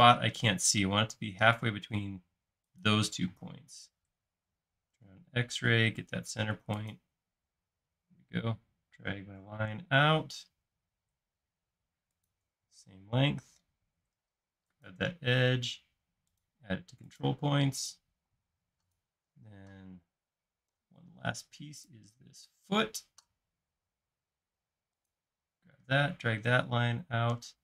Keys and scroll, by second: 3.4 typing, 5.0 typing, 12.9 space, 18.4 space, 20.8 x, 22.9 |.